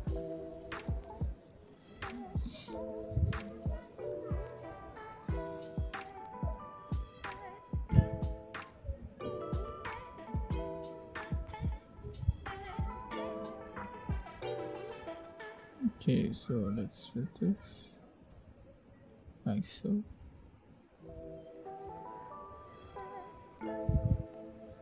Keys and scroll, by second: 21.4 0.